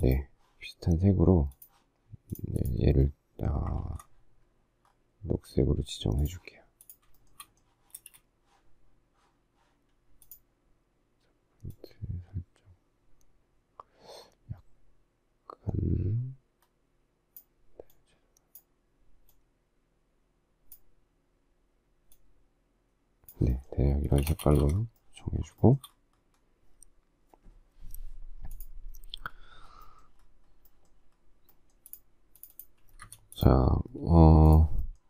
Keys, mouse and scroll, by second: 3.8 ctrl+z, 7.1 shift+middle click, 7.9 space, 24.1 space, 24.2 Escape, 25.6 shift+middle click, 33.0 Escape.